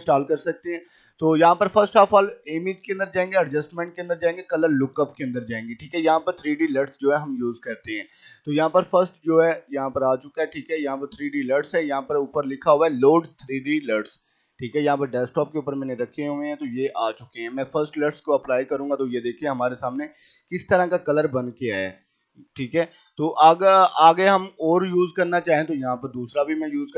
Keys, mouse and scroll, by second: 0.9 click, 5.8-10.6 drag, 13.6 click, 17.7 click, 21.9 click, 26.2 click.